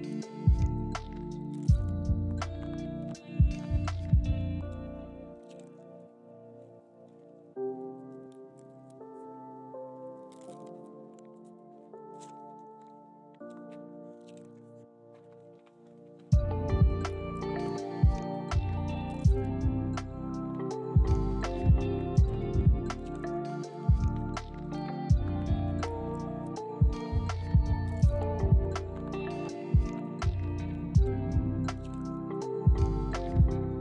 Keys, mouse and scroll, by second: 0.5 shift+middle click, 7.8 g, 10.5 ctrl+click, 11.6 z, 12.7 shift+middle click, 13.3-14.1 shift+scroll up 2, 14.1 scroll down 1, 14.7 shift+middle click, 18.3 Tab, 25.5 z, 30.7 shift+d.